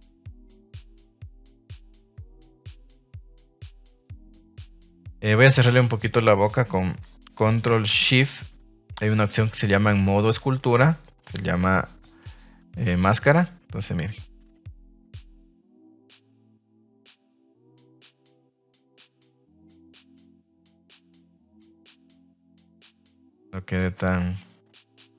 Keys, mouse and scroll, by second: 0.8 shift+middle click, 1.4 middle drag, 1.8 shift+middle click, 2.4 right click, 3.5 ctrl+Tab, 3.8 middle click, 4.2 f, 4.6 middle click, 5.2 middle click, 5.5 shift+middle click, 8.3-10.5 ctrl+shift+drag, 11.1 middle click, 12.0 f, 13.3 click, 16.3 middle click, 17.4 middle click, 17.7 ctrl+z, 17.9 middle click, 18.8 middle click, 19.6 click, 20.2 middle click, 20.8 middle click, 23.2 click.